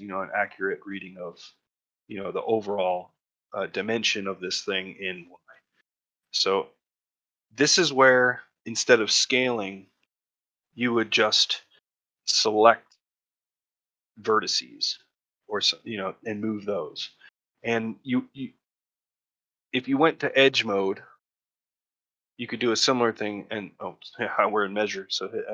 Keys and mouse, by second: 3.1 shift+middle click, 3.4 ctrl+middle click, 5.9 shift+middle click, 7.3 middle click, 7.9 shift+middle click, 8.3 middle click, 8.6 shift+middle click, 11.5 shift+middle click, 15.3-17.1 middle drag, 17.4 middle click, 21.5 2, 22.0 middle click, 23.0 click.